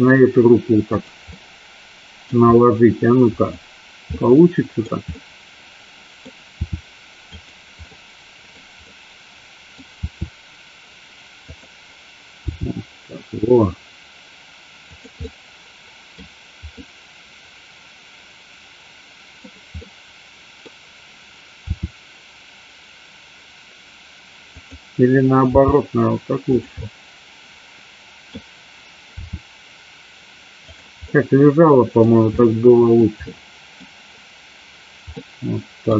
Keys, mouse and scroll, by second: 1.1 click, 1.3 middle click, 4.3 middle click, 5.2-6.3 middle drag, 6.5 r, 7.4 click, 7.9 middle click, 8.9 middle click, 10.0 r, 11.6 click, 12.5 g, 15.0 click, 15.3-16.1 middle drag, 16.9-19.5 middle drag, 19.8-20.2 scroll up 1, 20.2-20.7 middle drag, 20.7 scroll down 1, 21.7 r, 24.6 click, 25.6 g, 26.5 click, 26.9-28.4 middle drag, 29.3 r, 30.8 drag, 31.0-32.0 middle drag, 32.4 middle click, 33.3-33.9 middle drag, 35.3-35.9 middle drag.